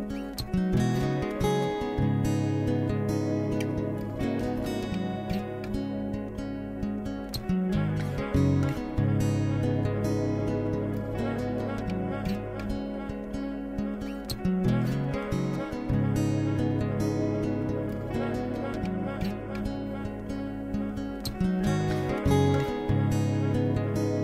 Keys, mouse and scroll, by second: 0.5 click, 1.4 middle click, 2.2 shift+click, 3.1 x, 4.7-7.7 middle drag, 9.0 click, 10.0 click, 12.0 click, 13.1 a, 13.3 a, 13.7 click, 15.0 ctrl+KP_Add, 15.2 ctrl+KP_Add, 15.4 ctrl+KP_Add, 15.8 ctrl+KP_Add, 17.2 ctrl+KP_Add, 19.1-21.0 middle drag, 21.0 x, 23.0-24.2 middle drag.